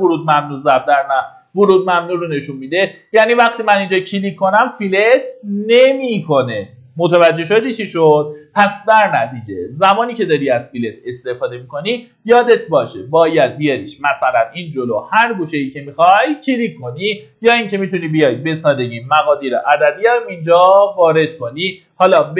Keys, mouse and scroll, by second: 1.8-2.5 scroll up 1, 3.2 click, 6.3-7.3 typing, 8.9 click, 18.6 KP_1, 21.0 click.